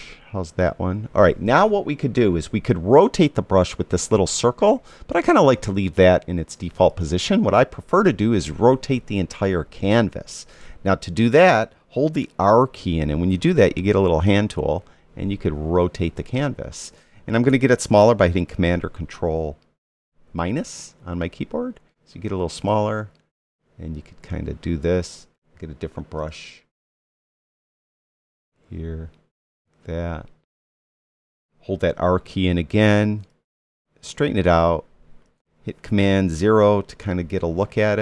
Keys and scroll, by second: 12.9 r, 19.8 super+-, 32.5 r, 36.5 super+0.